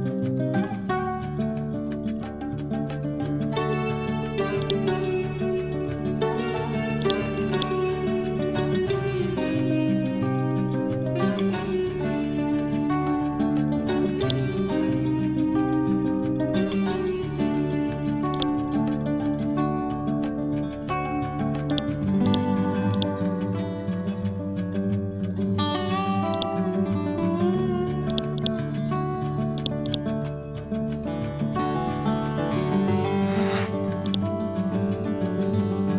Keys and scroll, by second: 2.9 Return, 6.2 p.